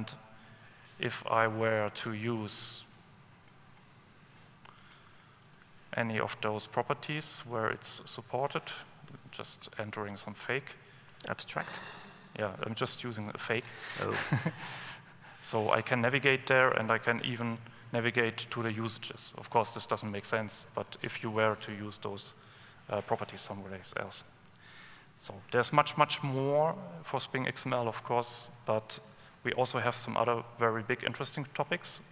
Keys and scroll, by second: 3.9 alt+Up, 5.7 ctrl+space, 13.2 Return, 17.8 alt+super+F7.